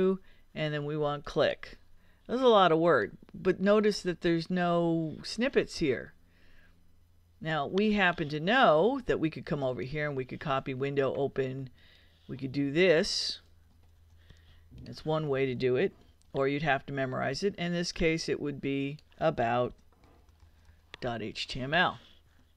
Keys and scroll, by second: 13.9 super+c, 16.1 super+v, 19.5-21.1 typing.